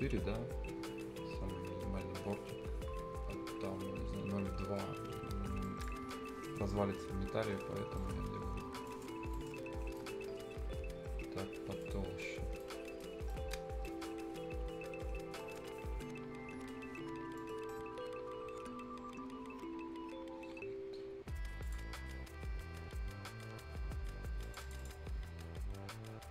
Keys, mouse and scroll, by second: 4.2-4.7 scroll up 1, 4.9-5.6 scroll down 1, 6.3 scroll up 1, 6.5 right click, 6.6-6.9 scroll down 1, 6.9 Escape, 7.1-7.5 scroll up 1, 7.8 scroll down 1, 8.0 right click, 8.2 scroll up 1, 8.9 click, 9.2 scroll down 1, 9.3 right click, 11.8 click, 12.2 scroll down 1, 12.4 scroll up 1, 12.6 right click, 13.1-13.8 scroll up 2, 13.3 right click, 13.9 right click, 14.2-15.3 scroll up 1, 15.4 right click, 15.8 scroll up 1, 16.0-17.4 right drag, 17.4 middle click, 21.6 click, 21.9 scroll down 1, 24.4 click, 25.2 click.